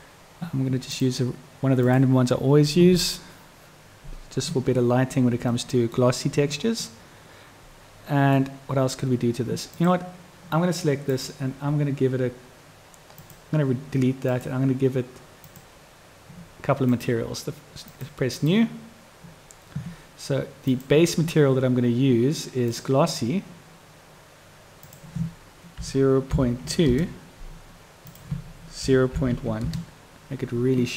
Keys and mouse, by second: 5.7 middle click, 7.0-8.5 middle drag, 9.9 click, 13.4 click, 15.5 click, 16.9 click, 17.9 click, 18.4 click, 20.7-23.0 drag, 25.0-30.9 drag.